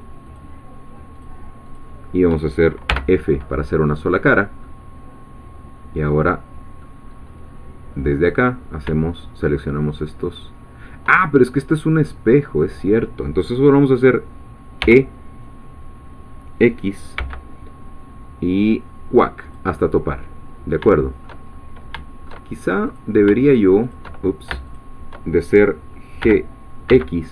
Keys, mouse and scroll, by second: 0.3 shift+click, 1.2 shift+click, 2.9 f, 4.1-4.6 scroll down 2, 4.6 scroll down 1, 4.6-7.0 middle drag, 7.1-7.4 scroll up 1, 8.4 click, 10.0 shift+click, 11.6 scroll down 1, 14.8 e, 17.2 x, 19.4 click, 19.9-21.4 middle drag, 21.5 shift+scroll up 1, 22.0 shift+middle click, 22.9 click, 23.5 shift+click, 23.9 shift+click, 24.7 shift+click, 26.2 g, 26.9 x.